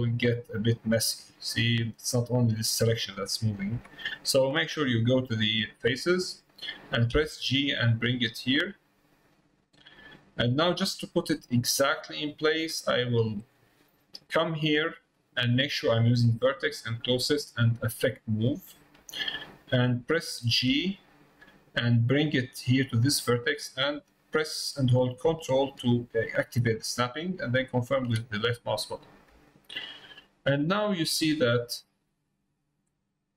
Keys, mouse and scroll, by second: 4.9 click, 10.2 middle click, 10.8 middle click, 11.8 middle click, 12.6 click, 15.2-18.4 drag, 29.5 middle click, 30.6 click, 31.1 click.